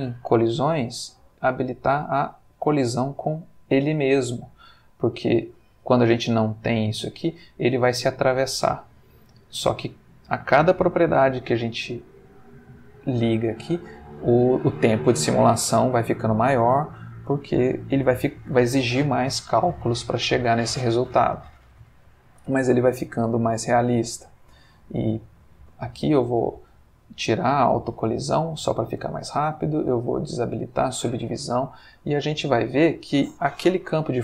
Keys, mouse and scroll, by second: 1.9 click, 3.9 space, 25.4 Escape, 27.5 click, 28.6 click, 30.3 click, 31.6-32.4 middle drag, 33.7 shift+a.